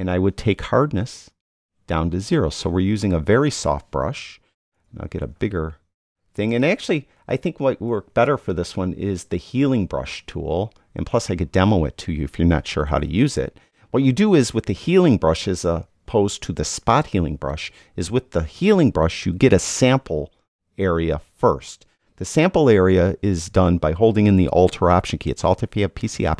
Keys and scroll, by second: 4.7 ].